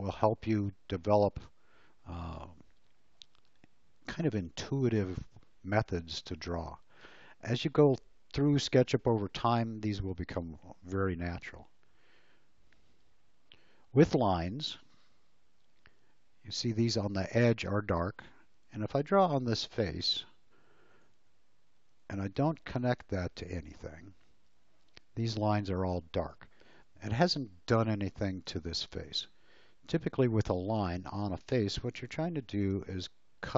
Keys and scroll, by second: 14.1 l, 24.6 space, 31.9 l.